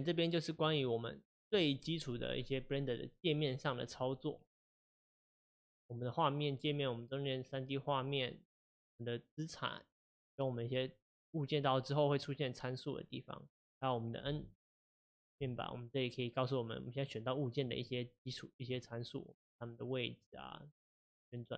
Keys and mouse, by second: 14.7 n, 15.2 n, 17.1 click, 17.9 click, 18.8 click, 20.3 click.